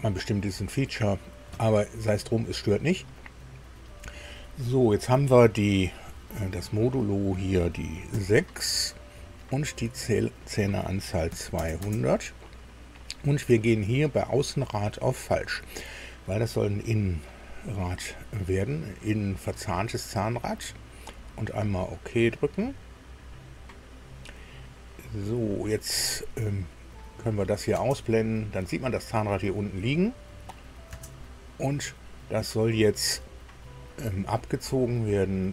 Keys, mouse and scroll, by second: 6.8 click, 8.1 KP_6, 10.0 click, 11.3 KP_2, 11.5 KP_0, 11.8 KP_0, 14.5 click, 15.3 click, 21.5 click, 26.6 click, 30.9 space, 33.8 click.